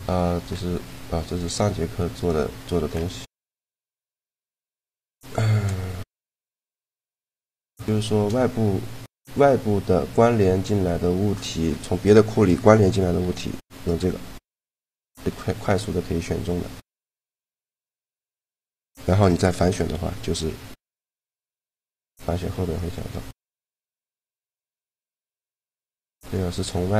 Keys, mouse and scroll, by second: 1.2 middle click, 1.4 s, 4.4 right click, 4.8 shift+l, 7.1-10.9 middle drag, 11.2-12.9 right drag, 12.9 shift+l, 15.4 middle click, 19.6 ctrl+i, 20.8 g, 22.2-24.4 drag, 22.8 g, 24.4-25.8 middle drag, 25.2 a, 25.8-26.9 right drag.